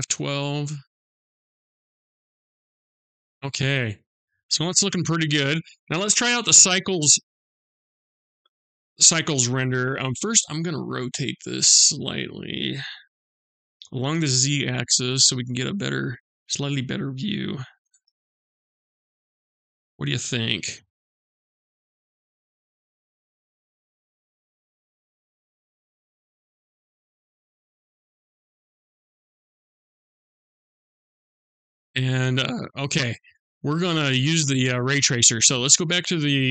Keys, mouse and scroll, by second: 11.3 click, 13.0 r, 22.1 r, 36.0 click.